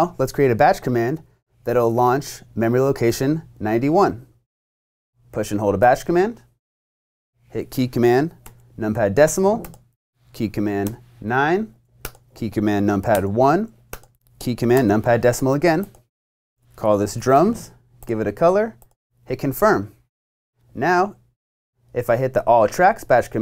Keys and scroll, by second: 8.5 ., 10.9 9, 13.2 i, 14.7 ., 16.5-17.6 typing.